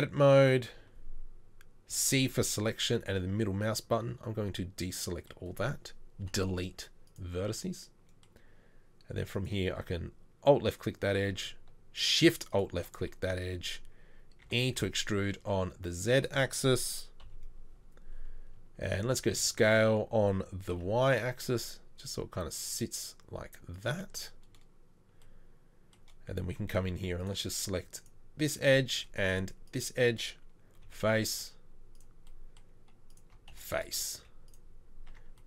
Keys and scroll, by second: 1.9 c, 6.2 Delete, 15.1 e, 17.2 KP_3, 19.1 s, 30.9 f, 33.5 f, 34.2 z, 35.1 Tab.